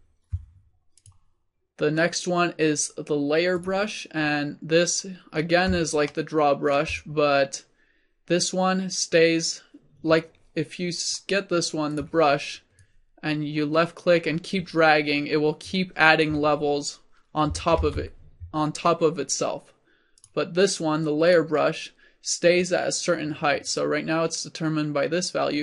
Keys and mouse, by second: 1.0-5.2 middle drag, 6.2-7.7 middle drag, 11.2-14.7 drag, 18.3 ctrl+z, 21.4 click.